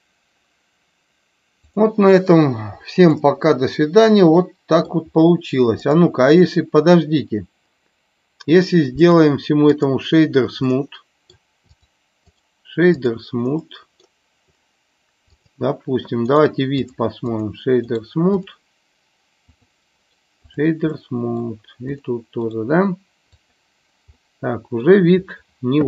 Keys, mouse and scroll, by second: 1.6 click, 3.0-4.9 middle drag, 5.9 click, 10.6 middle click, 11.7 click, 13.6-14.0 middle drag, 15.4 click, 17.1 click, 19.4 click, 21.0 middle click, 22.0 click, 24.1-24.7 middle drag.